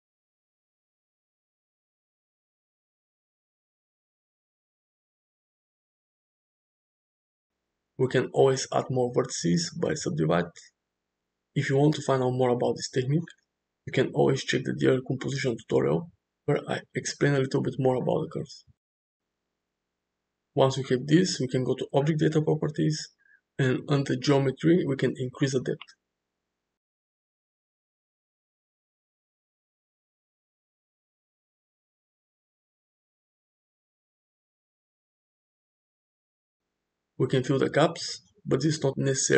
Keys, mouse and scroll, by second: 0.9 click, 1.9 g, 2.4 click, 3.3 g, 3.8 click, 4.1 g, 6.1 shift+middle click, 6.6-7.3 drag, 8.4-8.9 right drag, 9.7 right click, 11.3 click, 11.7 g, 12.8 click, 12.9-15.5 typing, 13.1 click, 13.7 click, 14.1 click, 14.4 click, 14.6 click, 14.8 click, 15.0 shift+click, 15.4 click, 15.7 shift+click, 16.0 click, 16.6 click, 17.0 g, 17.1 click, 17.2 g, 19.5 Tab, 20.5 Tab, 21.7 Tab, 22.9 click, 24.1 click, 26.9-32.0 drag, 34.2-35.9 middle drag, 37.1 click, 37.8-39.0 middle drag.